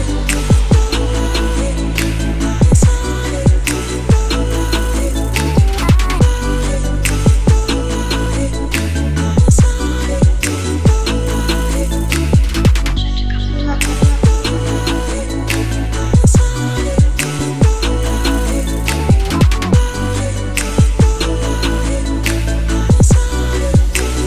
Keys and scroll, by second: 20.2 BackSpace, 20.3 3, 20.6 Return, 23.0 BackSpace, 23.3 3, 23.5 Return.